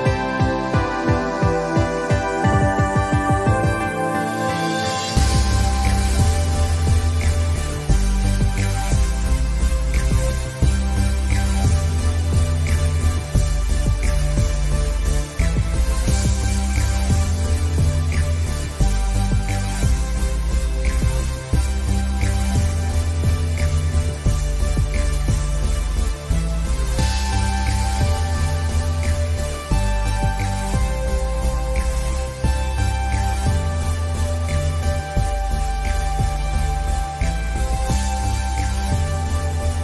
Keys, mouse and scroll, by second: 0.0 click, 0.6 alt+scroll up 2, 1.0 scroll down 1, 1.8 click, 2.1 space, 2.6 alt+scroll down 1, 2.7 scroll up 1, 3.9-5.9 drag, 6.0-6.5 scroll up 2, 7.2 click, 8.3 scroll up 1, 9.7-11.6 drag, 11.6 space, 12.2-12.6 scroll down 2, 13.3 click, 16.1 click, 16.5 alt+scroll up 1, 17.2 scroll up 1, 17.3-22.3 drag, 25.4 scroll down 1, 26.8 space, 27.2 space, 28.1-32.7 drag, 32.7 scroll down 1, 33.8 alt+scroll down 1, 35.0 click, 38.2 ctrl+g, 39.2 ctrl+z.